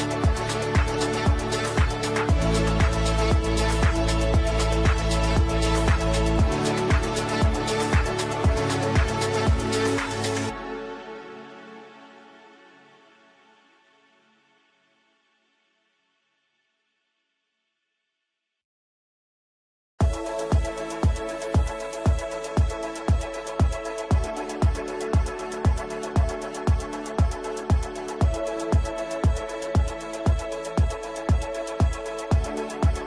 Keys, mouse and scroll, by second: 2.6 shift+click, 3.1 e, 3.9 click, 6.0 ctrl+right click, 6.4 shift+click, 6.6 c, 7.0 click, 7.6-12.1 shift+drag, 12.4 ctrl+a, 13.7 space, 16.9 space, 18.3 ctrl+space, 18.7 F3, 19.3 F2, 19.5 click, 19.7-24.0 typing, 24.9 click, 29.2 shift+click, 29.2-30.0 typing, 30.7 click, 31.6-33.0 shift+drag.